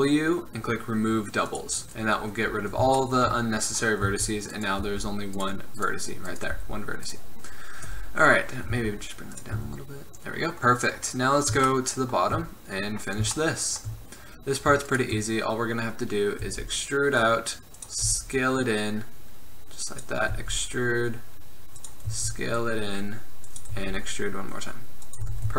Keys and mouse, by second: 2.6 click, 4.2 z, 4.9 g, 6.7 g, 8.0 KP_1, 8.8 g, 9.7 z, 10.9 middle click, 13.8 middle click, 14.2 middle click, 16.6 e, 18.2 s, 20.5 e, 22.3 s, 23.9 e, 25.4 Tab.